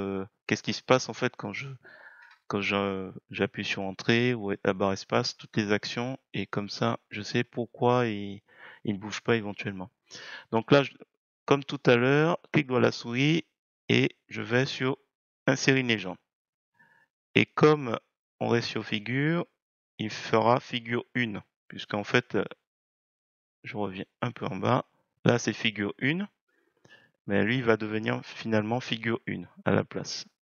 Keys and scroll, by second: 2.1 Return.